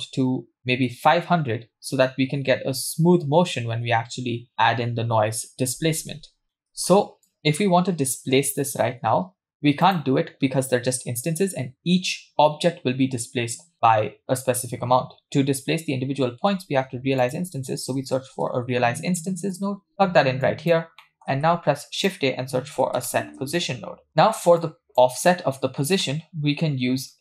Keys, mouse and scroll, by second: 0.6 0, 6.4 scroll down 2, 6.5 middle click, 7.3 click, 9.9 click, 16.7 shift+a, 20.5 click, 21.0 middle click, 21.3 shift+a, 24.6 click, 25.3 middle click.